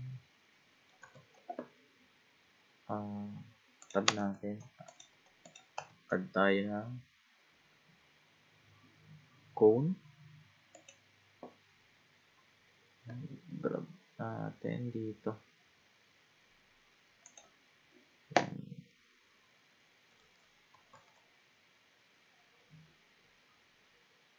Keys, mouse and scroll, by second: 1.2 shift+a, 3.8 click, 4.1 Tab, 4.9 shift+click, 5.5 click, 5.9 shift+a, 13.5 g, 18.9-20.9 middle drag, 20.9 ctrl+z, 22.2-24.1 scroll up 18.